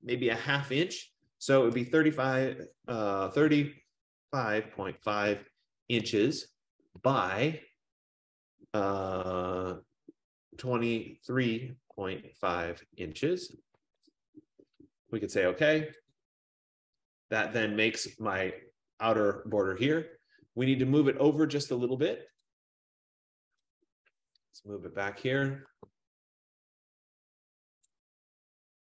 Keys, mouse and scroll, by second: 1.6-2.6 typing, 3.9-5.2 typing, 7.1 Tab, 10.4-13.9 typing, 16.3 click, 18.4 F15, 22.5 click, 28.0 shift+click.